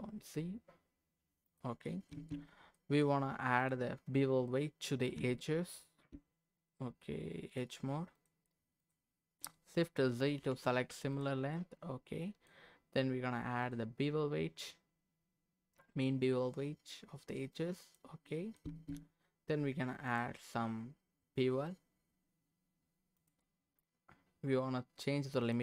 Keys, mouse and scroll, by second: 1.4 click, 1.9 middle click, 2.1 Tab, 2.7 middle click, 3.6 click, 5.8 Tab, 6.1 Tab, 8.1 click, 8.8 click, 10.4 shift+g, 11.5-12.5 middle drag, 13.6 click, 17.5 click, 18.3 middle click, 18.6 Tab, 20.1-23.4 drag, 25.4-25.6 drag.